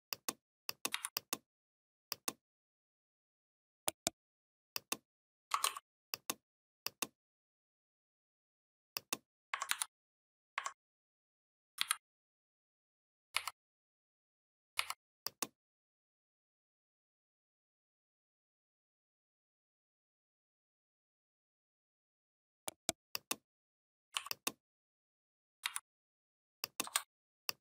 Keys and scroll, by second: 0.7 v, 9.5 ctrl+c, 11.6 ctrl+b, 13.2 Down, 25.5 v, 26.7 BackSpace.